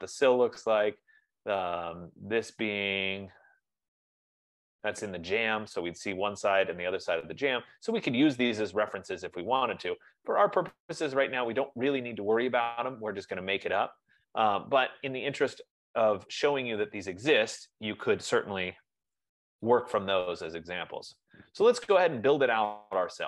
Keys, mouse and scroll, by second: 1.6-1.9 scroll, 2.4-2.9 scroll, 3.6-3.9 scroll, 7.4-7.9 scroll, 8.0-8.9 scroll, 10.6-10.9 scroll, 15.2-15.9 scroll, 16.1-16.9 scroll, 19.4 typing, 21.4-22.9 scroll.